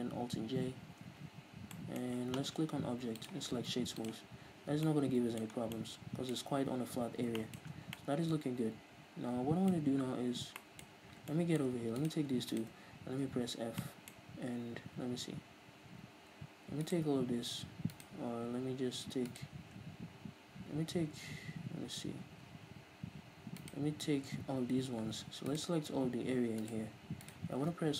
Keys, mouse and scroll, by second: 0.2 alt+j, 1.1 Tab, 1.4-1.8 scroll down 2, 1.8-3.2 middle drag, 3.2-4.9 drag, 4.3-4.9 scroll up 2, 4.9-11.1 middle drag, 5.6 scroll down 2, 7.0-7.4 scroll up 2, 7.8 Tab, 9.9-10.6 scroll up 2, 11.0 scroll up 2, 11.3 shift+middle click, 12.0-13.4 right drag, 13.4 f, 13.8-16.9 middle drag, 16.9-23.4 alt+right drag, 23.6-27.9 right drag.